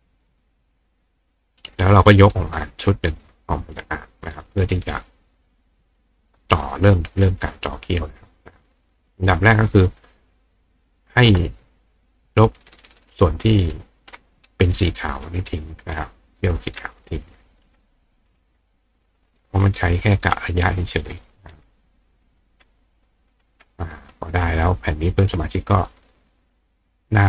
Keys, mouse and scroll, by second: 1.3-2.6 drag, 2.3 right click, 3.3 click, 5.6 click, 6.6 click, 8.2 click, 10.4 click, 14.5 click, 16.2 click, 17.4 click, 18.2 click, 19.3 click, 20.0 click, 21.1 click, 22.2 click, 23.2 click, 23.9 click, 24.6-27.2 drag.